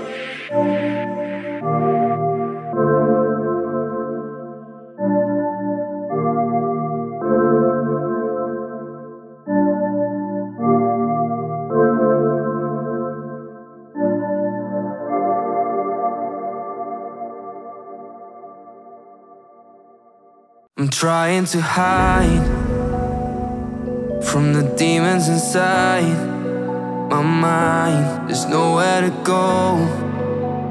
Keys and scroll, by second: 0.8 v, 6.7 shift+Down, 7.4 Down, 7.7 Right, 9.5 shift+Left, 10.0 Right, 11.3 Up, 11.8 Right, 21.4 b, 29.1 v.